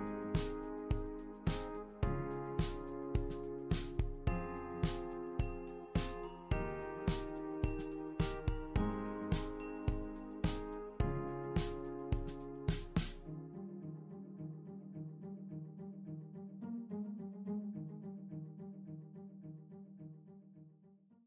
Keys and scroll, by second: 0.4 typing, 1.0 super+c, 7.1-9.6 typing.